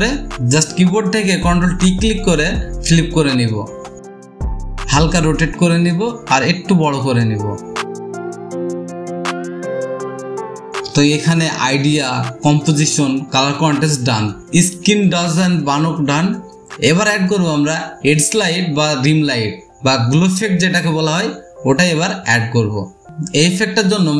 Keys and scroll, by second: 0.1 ctrl+t, 5.8 space, 5.9 space, 10.5 space.